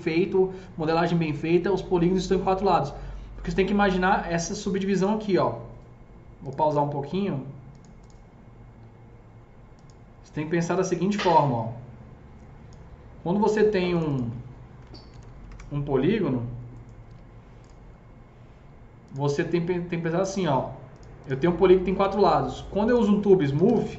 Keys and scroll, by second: 14.8 KP_4, 14.8 KP_0, 15.0 Tab, 15.2 KP_4, 15.3 KP_0, 15.5 Return, 17.0 alt+q, 23.3-23.9 typing.